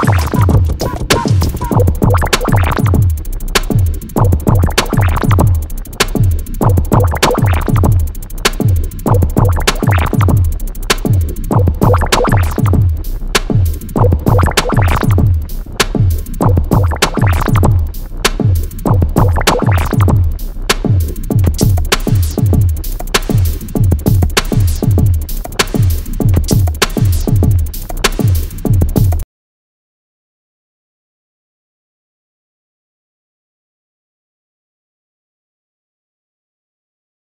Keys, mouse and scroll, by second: 3.6 click, 7.2 Delete, 13.3 click, 15.1 f, 18.4 click, 27.4 click, 30.9 KP_1, 31.9 KP_Enter, 33.7-35.7 scroll up 1, 35.7 click, 37.2 KP_7.